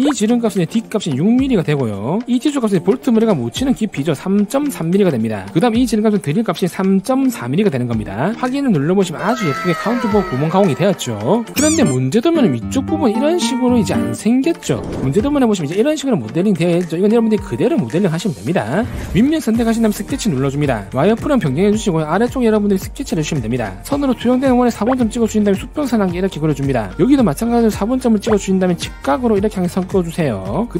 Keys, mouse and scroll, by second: 1.1 click, 2.1 click, 4.8 3, 5.2 3, 7.2 3, 7.8 4, 9.0 click, 11.6-14.4 shift+middle drag, 20.1 click, 21.2 alt+w, 21.6 scroll down 1, 21.9 middle click, 22.7 scroll up 1, 23.2 middle click, 24.0 1, 25.3 click, 26.5 click, 28.8 click, 30.4 click.